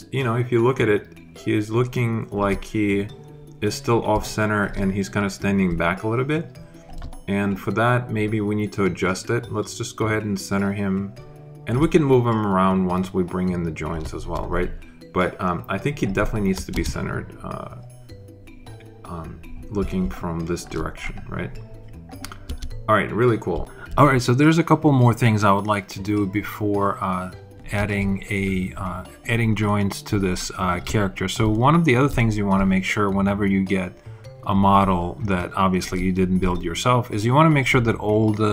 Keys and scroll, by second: 16.6 alt+space, 17.5 space, 22.3 space.